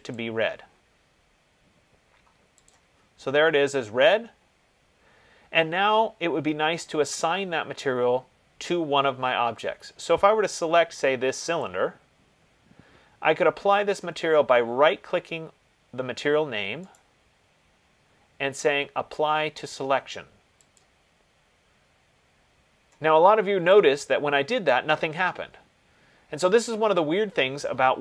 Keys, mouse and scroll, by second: 0.4 click, 2.9 click, 11.9 click, 17.2 right click, 21.0 click, 24.9 click.